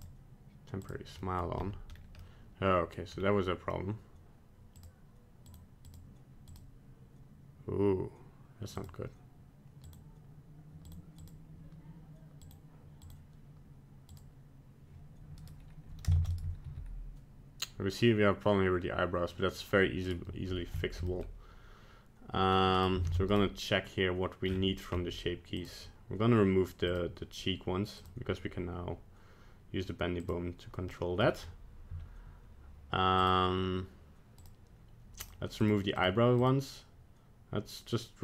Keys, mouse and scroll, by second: 0.0 click, 0.8 click, 1.3 middle click, 1.4 middle click, 1.6-2.2 scroll up 2, 2.2 middle click, 3.1 scroll down 2, 4.8 click, 5.5 click, 5.9 click, 6.5 click, 8.8 click, 9.8 click, 10.9 click, 11.2 click, 12.4 click, 13.1 click, 14.1 click, 15.4 right click, 16.2 ctrl+Tab, 16.4 right click, 16.6 g, 20.8 shift+middle click, 21.1 middle click, 22.8 right click, 23.1 ctrl+Tab, 23.3 right click, 24.4-25.3 scroll down 9, 25.6 click, 26.9 click, 28.0 click, 30.2 click, 30.9 middle click, 31.4-32.2 scroll up 1, 33.2 click, 34.4 click, 35.2 click, 35.6 click, 36.0 click, 36.4 click.